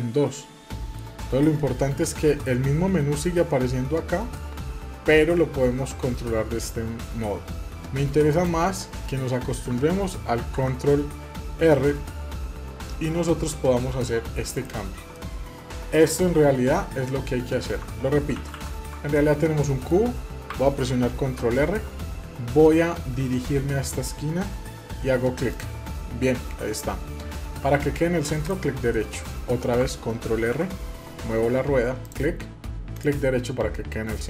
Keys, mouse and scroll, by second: 4.4-7.4 middle drag, 8.3-10.4 drag, 10.4 ctrl+r, 15.1-18.0 middle drag, 18.1 ctrl+z, 18.3 ctrl+z, 18.5 ctrl+z, 19.1-21.2 middle drag, 21.2 ctrl+r, 28.9-30.4 middle drag, 30.4 ctrl+r, 33.4-34.2 middle drag.